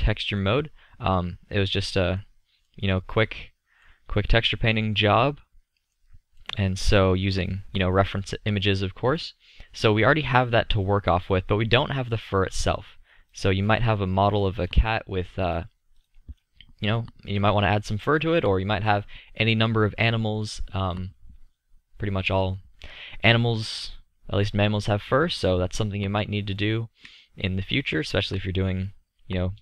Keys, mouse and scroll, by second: 0.9-1.2 middle drag, 3.7 middle click, 5.7-6.1 middle drag, 24.0-29.6 middle drag.